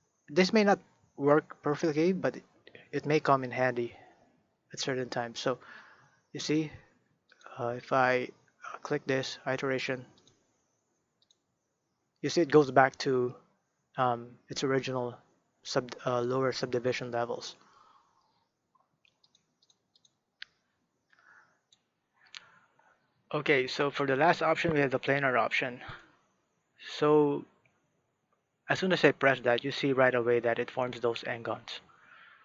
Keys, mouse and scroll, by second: 6.4-14.2 drag, 17.5-19.2 middle drag, 19.2-21.7 drag, 25.9 click, 28.8-31.9 middle drag.